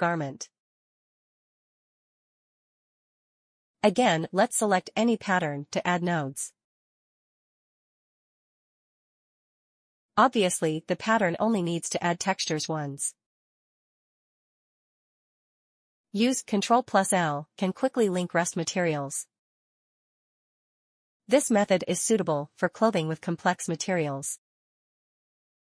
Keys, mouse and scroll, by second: 0.8 click, 1.3 click, 1.8-2.6 scroll down 1, 2.6 click, 5.2 click, 6.9 ctrl+shift+t, 7.0 ctrl+v, 7.0 Return, 8.3 shift+click, 9.2 click, 12.6 a, 14.7 ctrl+i, 15.9 click, 18.1 middle click, 18.9 middle click, 19.2-19.8 scroll up 1, 20.2 shift+middle click, 20.5 shift+middle click, 20.7 scroll up 1, 21.4 shift+middle click, 22.2 shift+middle click, 24.5 middle click, 24.8 middle click, 24.8 click.